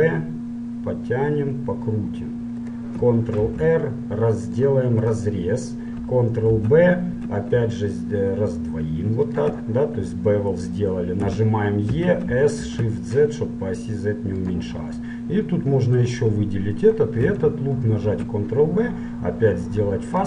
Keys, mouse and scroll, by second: 0.0 ctrl+b, 3.6 ctrl+r, 5.6-9.4 middle drag, 6.8 ctrl+b, 10.6-11.6 drag, 11.4 e, 11.6-14.5 middle drag, 15.0 middle click, 16.0-19.0 right drag, 18.2 ctrl+b.